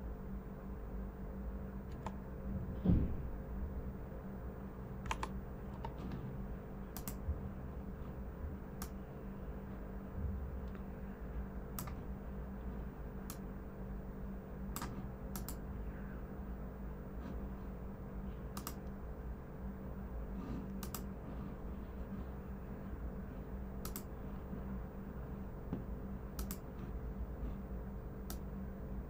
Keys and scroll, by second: 1.8 super+=, 5.1 super+=.